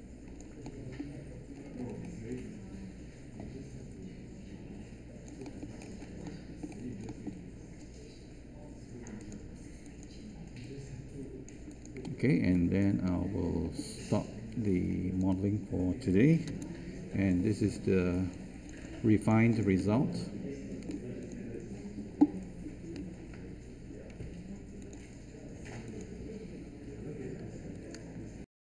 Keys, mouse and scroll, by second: 16.5 ctrl+space.